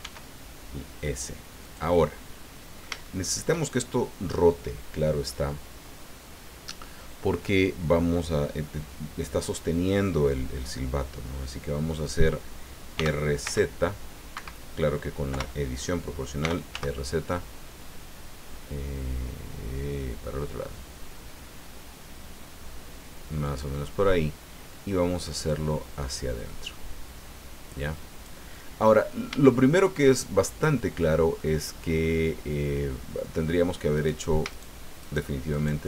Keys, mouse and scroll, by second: 0.0 s, 1.6 click, 2.0 click, 2.0 middle click, 4.0-5.4 drag, 12.9 r, 13.4 z, 14.3 Escape, 15.3 o, 16.4 r, 16.7 z, 18.2 scroll up 2, 21.1-21.5 scroll up 2, 22.6 scroll up 2, 23.4 click, 25.5-28.4 drag, 28.5 middle click, 29.4 shift+middle click, 30.1 shift+middle click, 30.5-31.5 drag, 32.0-32.4 scroll up 1, 33.9 right click, 34.5 shift+right click, 35.0 shift+right click, 35.5 shift+right click.